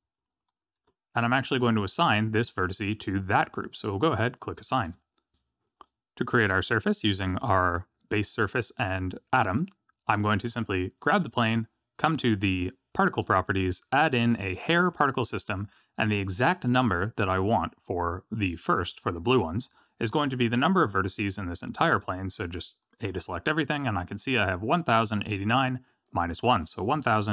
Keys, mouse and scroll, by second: 3.8 click, 4.8 Tab, 10.4 click, 13.1 click, 13.9 click, 14.9 click, 22.0 Tab, 23.1 a, 26.0 click.